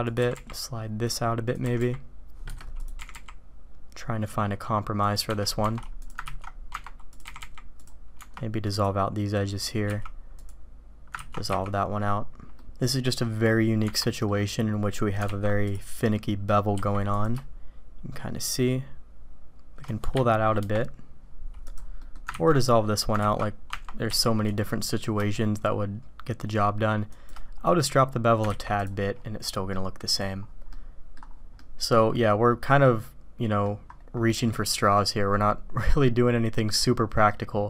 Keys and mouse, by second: 0.0 click, 0.2 g, 1.5-2.6 drag, 2.7 click, 5.2 Escape, 5.6 Tab, 6.3 ctrl+x, 6.6 Tab, 7.2 g, 8.1 Tab, 8.7 click, 9.5 click, 9.9 z, 10.4 click, 11.1 ctrl+x, 11.5 z, 12.5-13.2 drag, 14.3-15.0 drag, 15.2 alt+v, 16.1 click, 16.7 q, 22.0 click, 22.3 ctrl+x, 23.2 ctrl+z, 23.7 Tab, 24.1 q, 29.7 drag, 30.7-31.1 drag, 31.6-33.6 drag, 34.4-34.9 drag, 36.7-37.3 drag.